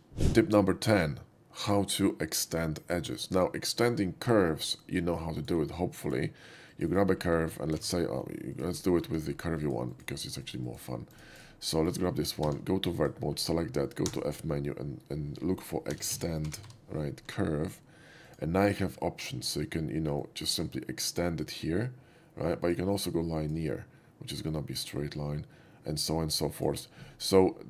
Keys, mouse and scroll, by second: 5.4 click, 6.1 click, 6.8 click, 7.0 right click, 7.3 middle click, 7.9 ctrl+z, 8.6 click, 8.9 alt+middle click, 9.7 alt+click, 10.0 alt+click, 10.3 alt+click, 10.5 alt+click, 10.7 alt+click, 11.2 alt+click, 11.5-11.8 alt+right drag, 11.9 shift+middle click, 12.6 1, 13.0 drag, 13.3 middle click, 14.0 f, 16.0 e, 16.1 x, 16.5 t, 16.7 e, 18.4 click, 20.2-22.8 drag, 23.4 click, 24.6-26.7 drag.